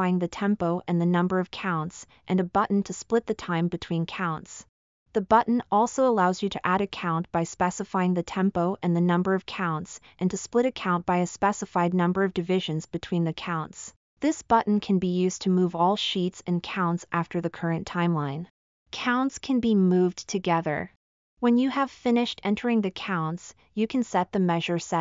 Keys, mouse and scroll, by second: 3.2 click, 5.3 click, 8.3 click, 9.7-10.5 drag, 11.0 click.